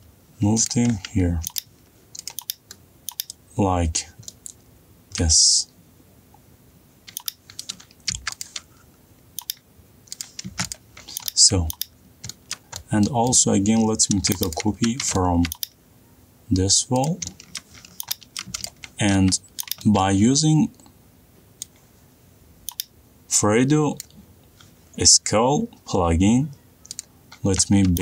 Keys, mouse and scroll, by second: 1.6 Up, 1.8 middle click, 2.2 middle click, 3.2 click, 4.2 middle click, 5.0 middle click, 5.0 middle click, 5.0 middle click, 5.8 middle click, 5.8 middle click, 5.9 middle click, 7.7 click, 8.6 click, 8.7 middle click, 9.2 m, 9.5 click, 11.3 click, 11.5 click, 12.1 middle click, 12.4 middle click, 12.6 click, 12.7 middle click, 13.1 middle click, 13.4 middle click, 13.6 middle click, 13.7 middle click, 14.1 middle click, 14.4 click, 15.3 m, 15.6 click, 16.5 middle click, 18.1 click, 18.9 middle click, 18.9 middle click, 19.5 middle click, 19.7 click, 19.9 middle click, 20.2 shift+middle click, 20.6 middle click, 24.9 click.